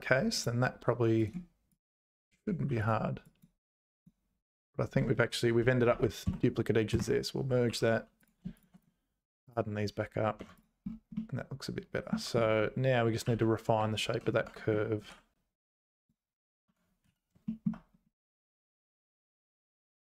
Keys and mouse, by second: 1.3 right click, 2.7 2, 3.4 click, 5.9 a, 6.3 space, 7.7 2, 8.2 click, 8.9-10.4 right drag, 10.4 Tab, 10.6 click, 11.1 middle click, 12.1 Tab, 13.3 2, 13.8 `, 14.4 Tab, 15.1 alt+h, 16.7 Tab, 17.0 z, 17.4 shift+click.